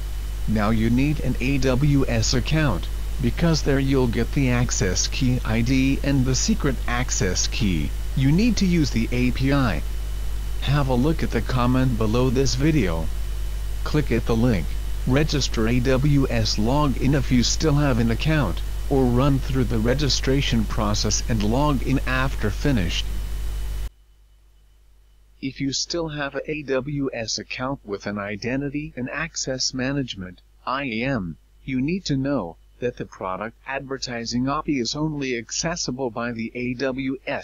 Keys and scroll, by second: 0.0-2.7 typing.